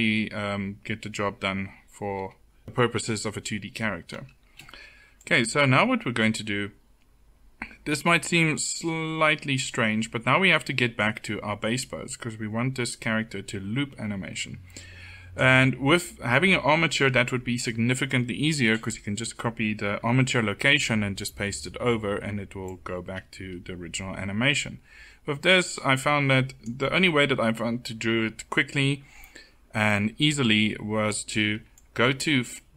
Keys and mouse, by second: 3.8-15.3 drag, 22.4-32.7 drag.